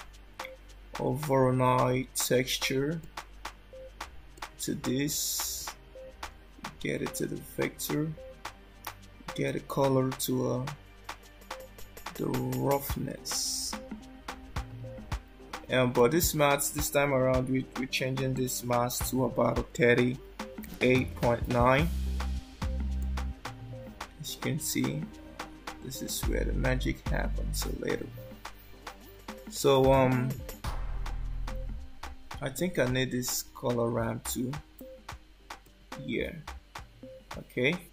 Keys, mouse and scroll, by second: 5.5 click, 9.4 click, 15.9 click, 24.7-25.0 scroll down 2, 25.0 scroll up 4, 26.7 scroll down 2, 33.3 click, 34.4 shift+d.